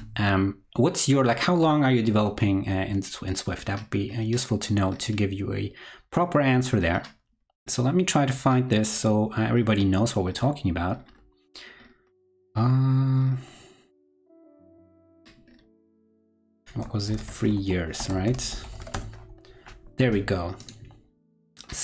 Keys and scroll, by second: 17.1 super+f.